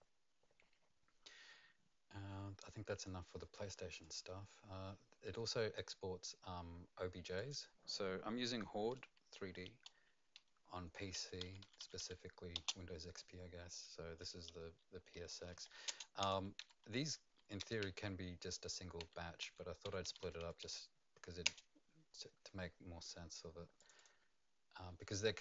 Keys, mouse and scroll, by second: 4.0 click, 5.7 click, 7.3 click, 10.7 F2, 11.1 Right, 11.4 Left, 11.6 Left, 12.0 4, 12.6 space, 14.9-16.0 typing, 16.6 Down, 17.0 F2, 17.8 Down, 17.8 F2, 17.8 Home, 17.8-18.7 Right, 19.0 Right, 19.4 Left, 19.8 Right, 20.0 Delete, 20.2 Delete, 20.4 Delete, 20.6 Delete, 21.4 Return, 23.7 click, 23.9 click.